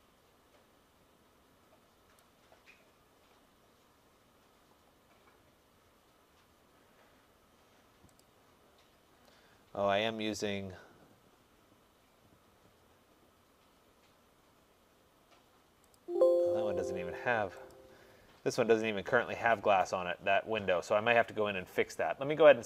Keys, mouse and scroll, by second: 2.3 click, 8.3 click, 9.2-10.1 scroll, 16.0 click, 17.7 click.